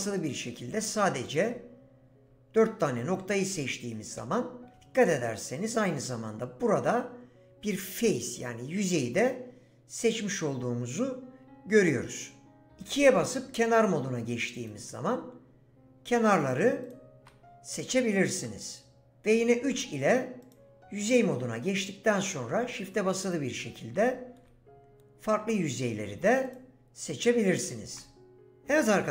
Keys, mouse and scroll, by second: 13.1 2, 19.7 3, 20.4 click, 23.2 shift+click.